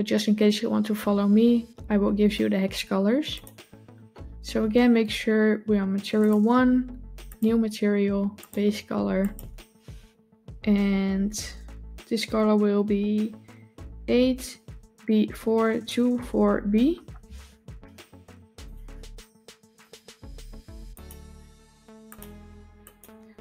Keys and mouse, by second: 3.2 click, 7.1 click, 8.2 click, 18.4 click, 19.6 click, 20.8 click, 22.0 drag.